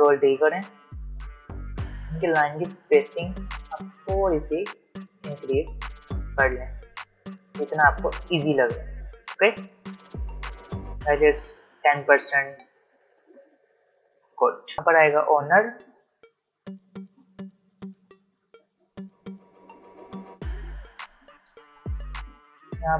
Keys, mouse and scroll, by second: 1.7 click, 14.3 click, 16.0-19.5 typing, 22.7-22.9 typing.